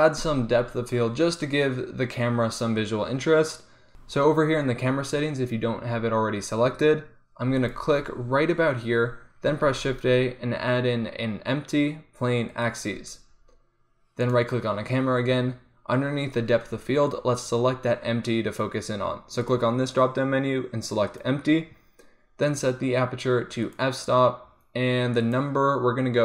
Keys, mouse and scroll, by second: 7.7-9.5 drag, 9.5 shift+a, 14.4-16.7 drag, 19.5-22.0 drag, 22.5-26.2 drag.